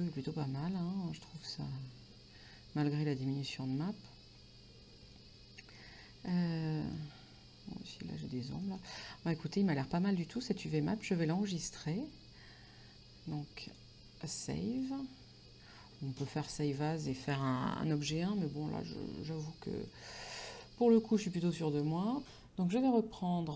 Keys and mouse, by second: 6.1 shift+middle click, 8.7 middle click, 10.5 shift+middle click, 13.8 click, 14.9 click, 20.0 middle click.